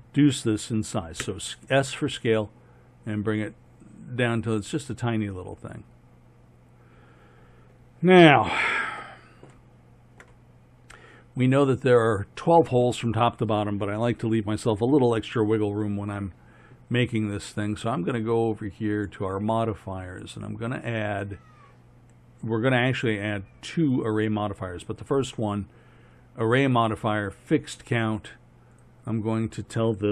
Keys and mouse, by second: 1.2 s, 8.8-15.2 middle drag.